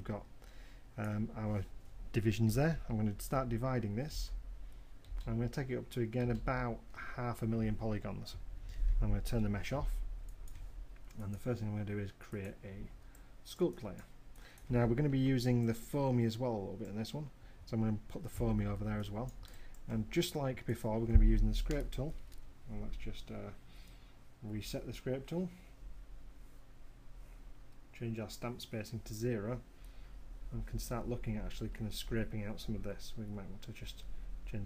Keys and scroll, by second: 3.8 shift+d, 10.3 w, 34.3 m.